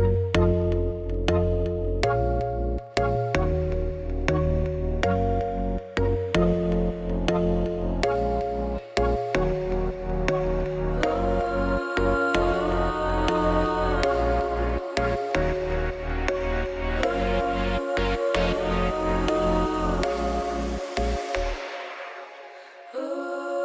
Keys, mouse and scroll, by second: 0.0 Tab, 0.3 scroll down 1, 0.8 click, 0.9 middle click, 1.5 scroll up 2, 2.5 ctrl+1, 3.1-4.2 right drag, 4.2-8.7 drag, 9.5 ctrl+1, 10.6 shift+middle click, 10.8 scroll up 1, 10.9-12.5 middle drag, 12.5-13.7 shift+drag, 13.7 scroll down 1, 14.1 middle click, 14.6 click, 14.8 middle click, 15.1 scroll down 3, 15.2 middle click, 15.7 scroll up 7, 16.2 click, 16.4 shift+middle click, 16.5 Tab, 16.6 scroll up 1, 16.8 3, 16.9 click, 19.9 2, 20.1 alt+click, 20.6 KP_7, 21.2 z.